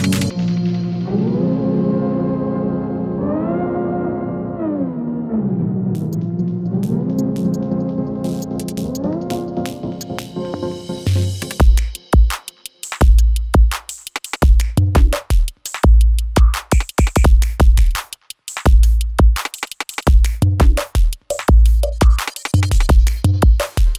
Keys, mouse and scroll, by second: 2.0 Right, 3.0 ctrl+alt+Home, 4.8 click, 6.9 Left, 8.6-22.2 drag, 22.9 u.